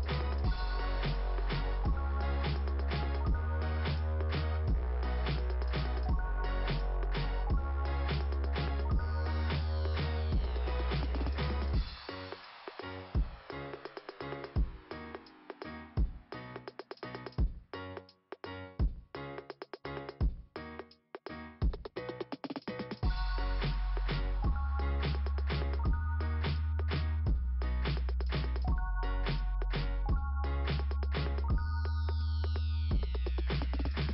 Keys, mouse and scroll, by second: 0.8-1.1 scroll down 3, 3.5 click, 4.5-4.9 scroll up 1, 8.7 ,, 10.1-10.6 scroll down 2, 12.7 click, 12.9 click, 15.5 right click, 15.8 right click, 16.1 right click, 16.8 click, 20.5 scroll down 1, 22.8 click, 23.0 click, 23.4-25.3 scroll down 2, 27.2 click, 27.2 scroll down 1, 27.3 click, 28.9 click, 31.3 middle click, 31.4 middle click, 31.4 middle click, 31.5 middle click, 31.5-33.6 typing, 31.8 middle click, 31.9 middle click, 32.1 middle click, 32.2 middle click.